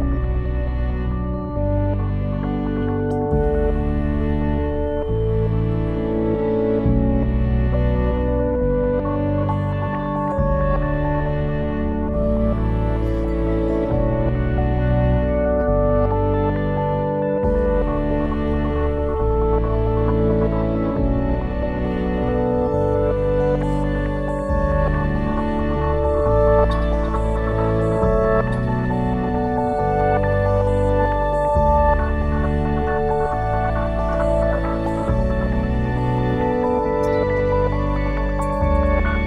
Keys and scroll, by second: 1.9 o, 2.9-5.1 typing, 6.3 Return, 25.2-26.4 typing, 26.5 Return.